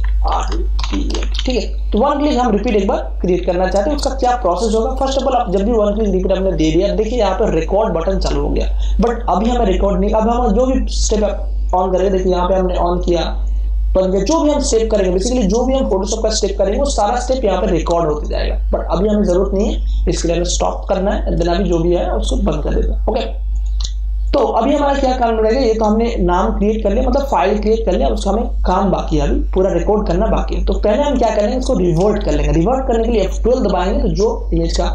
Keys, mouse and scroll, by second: 0.0-1.8 typing, 3.6 Return, 11.6 click, 20.6-31.2 drag, 31.2 ctrl+space, 31.4 ctrl+click, 31.9 ctrl+space, 33.5 F12.